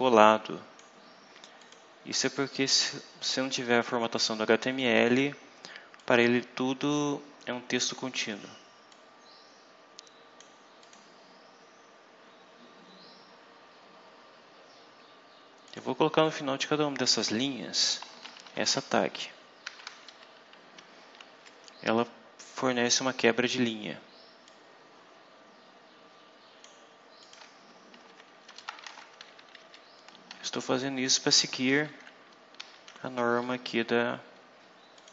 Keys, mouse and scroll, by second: 1.5 click, 3.8-5.1 drag, 5.9 click, 8.8-10.5 drag, 10.7 click, 11.2 scroll down 2, 11.7-12.4 scroll down 4, 12.7 scroll down 2, 13.2 scroll down 2, 13.8-14.6 scroll up 2, 15.6 click, 17.9-19.5 typing, 24.4-26.7 drag, 27.1 click, 27.9 shift+Left, 28.8 ctrl+shift+c, 29.0 ctrl+shift+Down, 29.3 ctrl+shift+End, 29.5 ctrl+shift+Down, 30.2 ctrl+v, 30.7 ctrl+Down, 31.3 ctrl+v, 31.6 ctrl+Down, 31.9 ctrl+End, 32.9 ctrl+Down, 34.9 click.